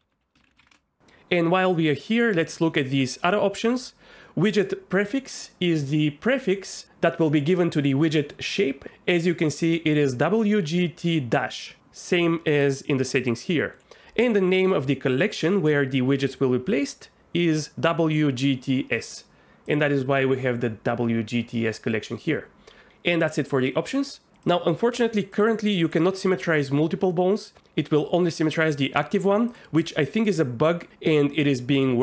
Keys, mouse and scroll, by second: 23.9 middle click, 25.3 shift+click, 31.7 click.